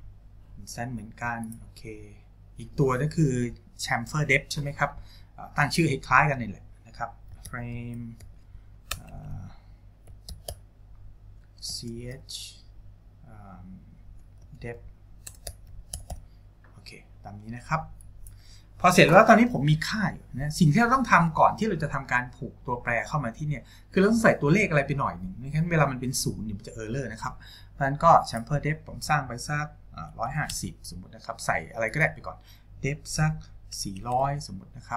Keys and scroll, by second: 7.3-12.7 typing, 14.7-16.7 typing, 30.3 KP_5, 30.5 KP_0, 34.0 KP_0.